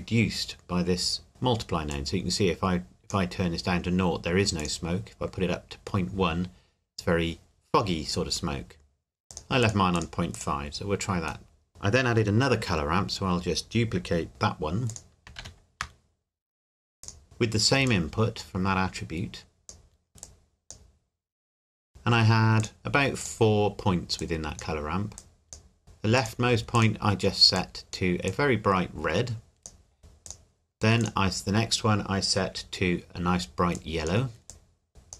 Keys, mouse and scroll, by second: 1.9 click, 9.3 click, 11.5 middle click, 11.7 click, 14.9 click, 15.4 shift+d, 17.0 click, 20.1 scroll up 1, 20.2 click, 30.2 click, 33.7 click.